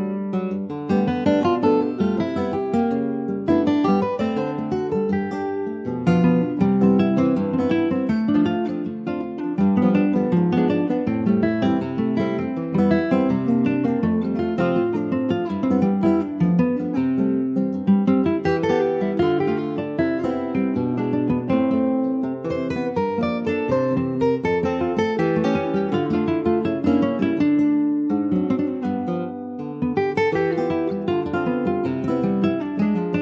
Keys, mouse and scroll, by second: 0.2 scroll down 2, 0.5 Tab, 0.6 click, 1.1 ctrl+a, 1.9 Tab, 2.4 middle click, 3.0 ctrl+s, 3.4 click, 3.8 m, 5.1 /, 6.3 ctrl+s, 6.4 click, 6.6 scroll down 2, 6.9-8.2 middle drag, 8.2 ctrl+s, 8.3 click, 8.7 middle click, 9.1 click, 9.9 Tab, 10.5 Tab, 11.5 l, 12.1 alt+middle click, 12.5 alt+middle click, 13.4 click, 15.2 Tab, 15.3 click, 15.7 middle click, 16.3 ctrl+s, 16.4 click, 17.1 shift+click, 17.6 ctrl+s, 18.1 /, 18.5-19.6 middle drag, 19.6 ctrl+a, 20.4 scroll up 1, 20.5 ctrl+a, 21.9 middle click, 22.2 ctrl+a, 22.7 scroll down 2, 22.9 middle click, 23.8 ctrl+s, 24.0 click, 24.4 click, 24.7-26.8 right drag, 26.8 ctrl+s, 27.1 click, 27.8 shift+d, 29.5 click, 30.8 ctrl+s, 30.9 click, 31.2 scroll up 2, 31.4 click, 31.9 shift+click, 32.9 ctrl+shift+b.